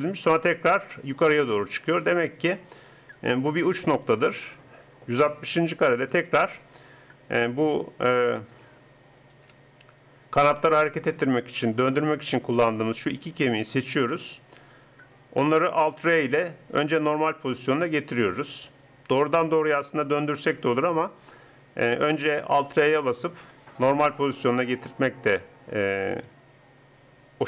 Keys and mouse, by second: 0.7-2.7 drag, 6.1-8.1 drag, 9.2-11.1 drag, 16.1 alt+r.